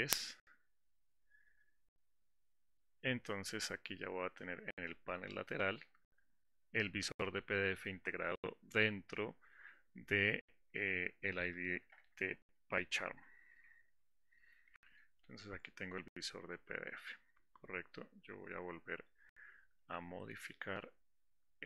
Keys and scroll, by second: 13.1 alt+4.